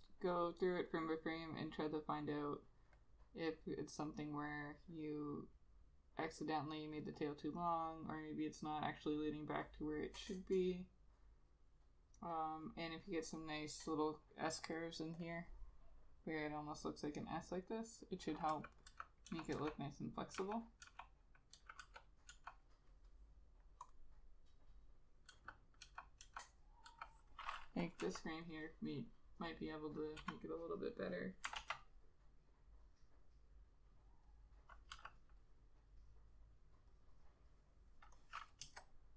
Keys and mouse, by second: 18.6-22.8 typing, 25.9 ], 26.4 ], 27.0 [, 28.2 e, 30.3 b, 31.7 ctrl+z, 35.0 e, 38.8 Return.